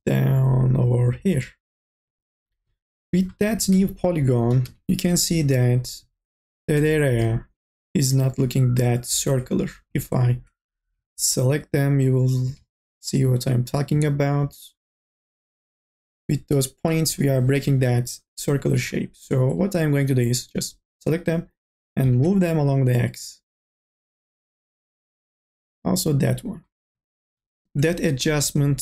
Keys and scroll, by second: 3.3-5.3 typing, 15.5 1, 17.1 KP_0, 22.4 ctrl+z, 24.2 e.